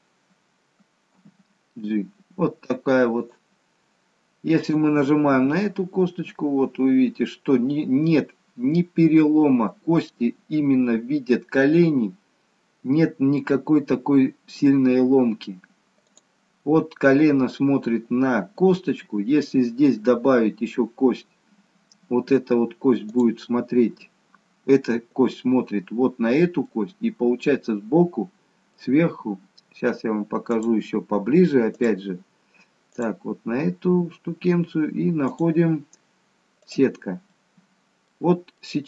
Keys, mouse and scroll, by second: 1.1 g, 4.6 click, 5.4 g, 21.7-23.0 scroll up 1, 23.0 click, 23.0-24.2 scroll up 1, 26.6 middle click, 30.5 click, 31.8 click, 35.4 click, 37.3 middle click, 38.6 middle click.